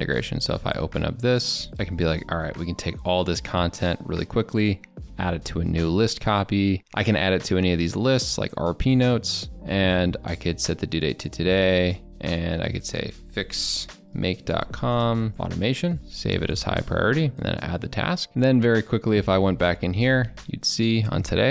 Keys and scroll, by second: 15.0 ctrl+BackSpace.